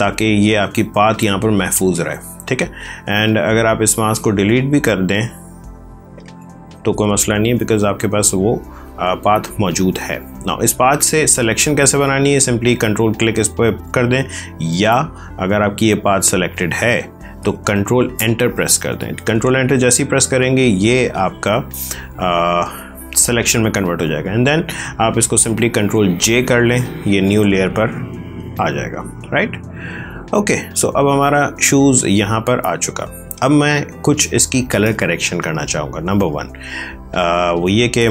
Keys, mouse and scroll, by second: 2.7 click, 6.0 click, 9.3 click, 14.6 ctrl+d, 15.4 click, 25.5 ctrl+j, 27.1 click, 29.6 click, 30.2 space, 30.7 ctrl+click.